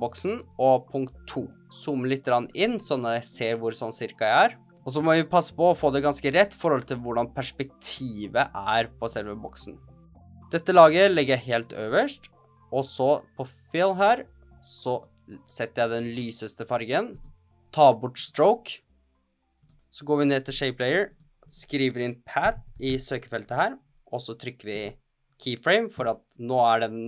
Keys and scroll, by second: 22.1-23.3 typing.